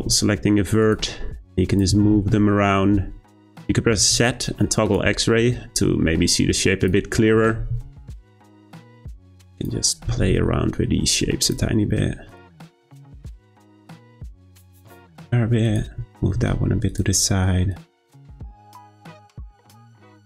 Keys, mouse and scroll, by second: 1.7 click, 1.9 g, 4.0 z, 6.8 click, 7.3 g, 9.5 click, 10.1 g, 12.3 click, 12.4 g, 13.7 click, 13.9 g, 15.6 click, 16.0 g, 17.7 click, 17.9 g, 19.0 g.